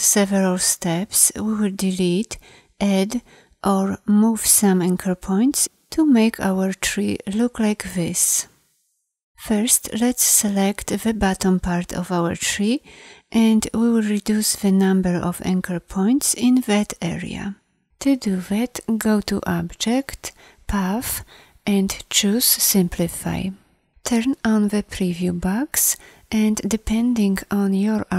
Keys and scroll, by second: 10.3 a.